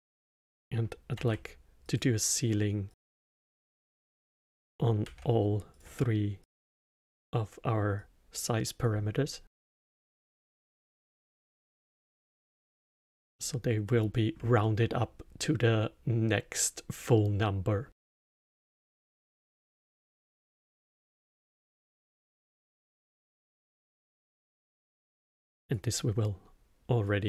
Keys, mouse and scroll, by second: 1.1 shift+d, 2.9 click, 4.2 click, 5.0 shift+d, 6.4-8.1 drag, 12.0-17.7 alt+middle drag, 20.2-21.6 middle drag, 21.6 scroll down 1, 22.3-24.6 middle drag, 24.6 drag, 27.0 drag.